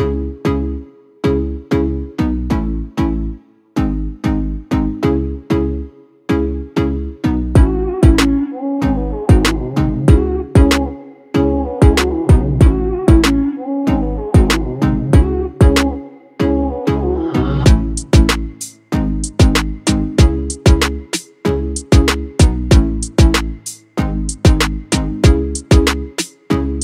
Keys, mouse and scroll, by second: 11.5 alt+scroll down 2, 12.5-13.2 drag, 20.3 v, 22.5 click, 26.0 click, 26.1 ctrl+0.